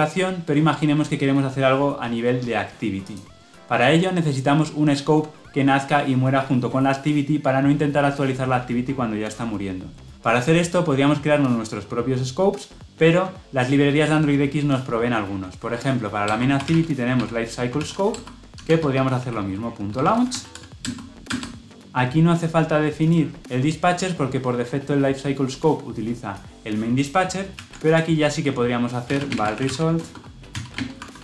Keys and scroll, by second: 18.0 Return, 27.4 ctrl+x.